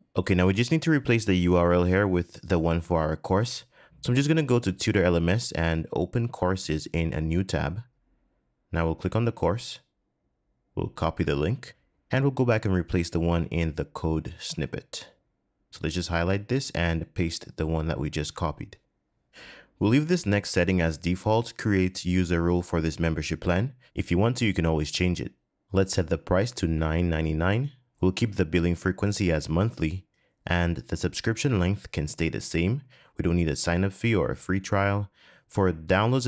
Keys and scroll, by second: 17.4 super+v.